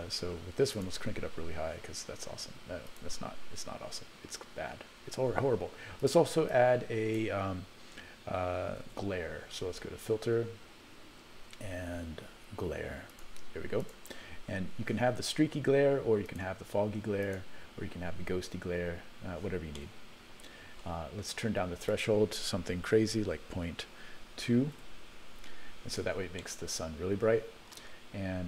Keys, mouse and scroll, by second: 0.8 click, 2.9 click, 6.1 click, 6.6 click, 8.9 shift+a, 16.3-17.5 drag, 19.8-20.8 middle drag, 22.0-25.0 drag, 26.4-27.8 middle drag.